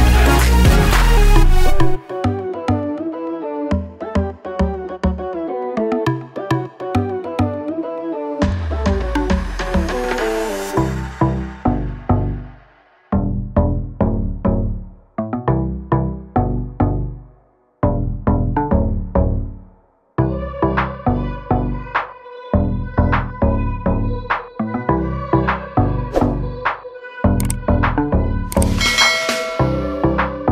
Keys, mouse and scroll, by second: 1.3 click, 7.1 click, 8.3 click, 8.5 double click, 10.9 click, 12.0 click, 15.5 click, 22.4 scroll up 1, 24.4 click, 26.6 click, 29.7 click.